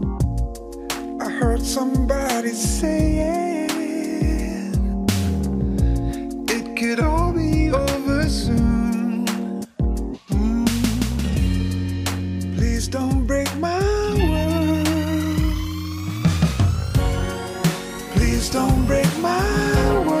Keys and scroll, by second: 15.8 Tab, 17.0 Tab, 18.1 Tab.